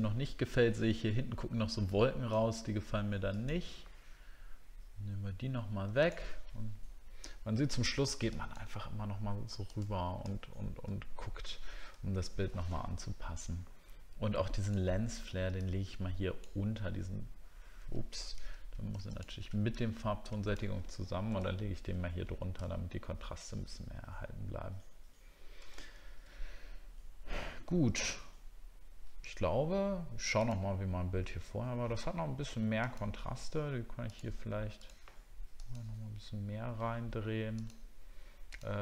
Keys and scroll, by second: 10.3 alt+scroll down 1, 12.0 alt+scroll up 1, 21.5 alt+scroll down 1, 22.7 alt+scroll up 1, 25.8 alt+scroll down 1.